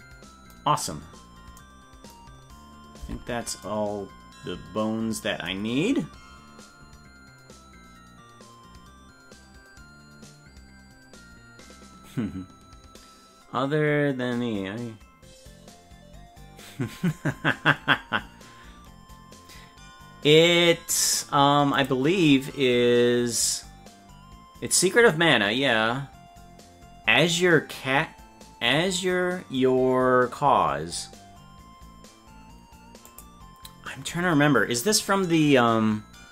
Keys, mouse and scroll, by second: 3.0 Tab.